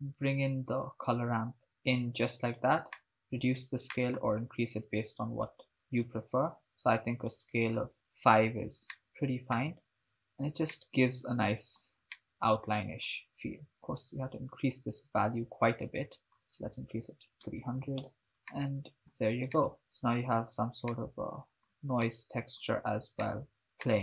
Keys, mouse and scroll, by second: 1.7-2.8 drag, 3.0 middle click, 3.9 middle click, 4.9 click, 7.4 click, 9.0-9.9 shift+middle drag, 9.9 shift+space, 10.8-11.9 ctrl+middle drag, 12.1-13.1 middle drag, 13.6-15.4 drag, 16.2-18.3 drag, 17.8 0, 18.5 ctrl+middle click, 19.7 shift+middle click, 21.1-21.9 ctrl+middle drag, 22.1-22.8 shift+middle drag, 23.4 ctrl+middle click.